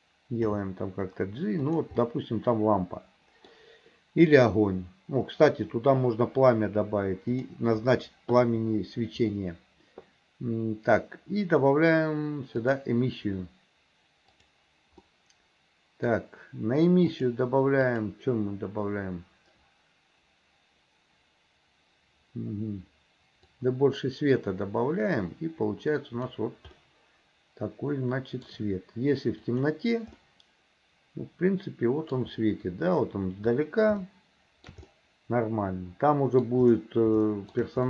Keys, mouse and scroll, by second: 0.5 g, 2.0-3.6 middle drag, 7.3 click, 12.6-14.6 drag, 15.1-16.1 middle drag, 17.3 click, 23.5-26.4 drag, 26.8-28.5 middle drag, 29.6 click, 30.2-32.2 middle drag, 34.1 shift+middle click, 34.9-36.5 middle drag, 37.4 shift+middle click.